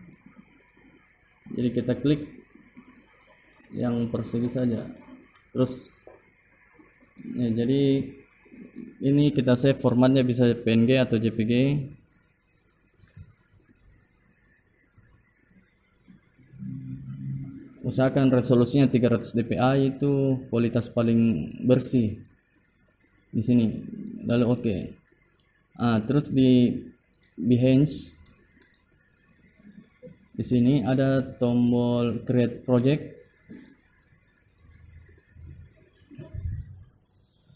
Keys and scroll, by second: 4.7 ctrl+a, 5.5 ctrl+g, 6.4 ctrl+e.